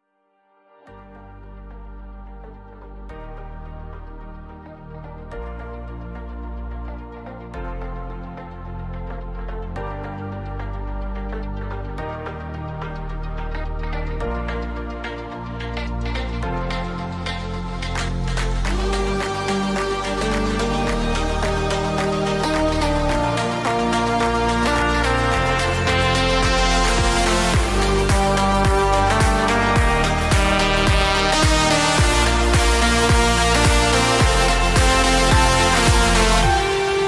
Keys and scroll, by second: 0.6 Return, 4.1 ctrl+c, 4.5 ctrl+v, 4.7 ctrl+s, 5.4-6.8 typing, 7.1 ctrl+s, 7.8 ctrl+x, 8.0 ctrl+s, 8.6 ctrl+c, 9.1 ctrl+c, 9.4 ctrl+s, 15.5 ctrl+v, 26.2 ctrl+c, 27.1 Return, 27.3 ctrl+v, 29.0 BackSpace, 30.1-32.1 typing.